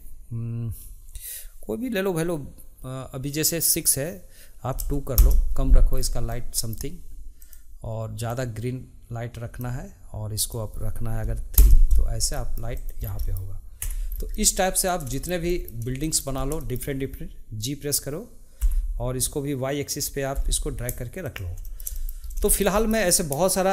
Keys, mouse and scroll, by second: 5.9 scroll down 2, 6.3-7.4 middle drag, 7.4 click, 10.4-12.3 drag, 12.3 middle click, 12.7 click, 13.0 scroll down 1, 13.2 middle click, 13.8 Tab, 14.0-14.3 scroll down 1, 14.3-14.7 middle drag, 14.7 click, 15.1-16.3 shift+middle drag, 16.3 scroll up 1, 16.6-18.6 shift+middle drag, 18.6 g, 21.6-22.2 shift+middle drag, 22.2 scroll, 22.4-23.7 shift+middle drag.